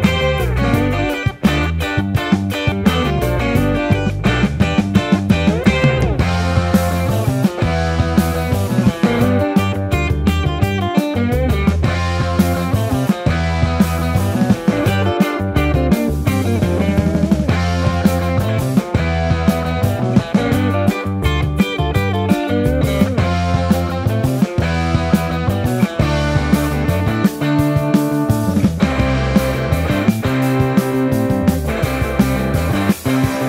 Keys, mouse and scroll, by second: 0.7 ctrl+z, 1.0 Delete, 1.5 Tab, 1.6 Tab, 3.1 ctrl+a, 6.2 shift+a, 6.7 s, 7.5 ctrl+2, 8.7 KP_1, 8.9 s, 9.5 s, 11.5 KP_1, 12.1 Tab, 12.3 Tab, 12.5 Tab, 12.9 Tab, 13.4 Tab, 13.6 Tab, 13.7 Tab, 14.4 Tab, 15.1 Tab, 15.5 l, 16.3 shift+Tab, 21.9 x, 23.1 KP_1, 28.9 ctrl+z, 29.3 KP_1, 30.7 s, 30.7 y, 31.0 y, 31.5 y, 32.3 ctrl+z, 33.0-33.4 typing.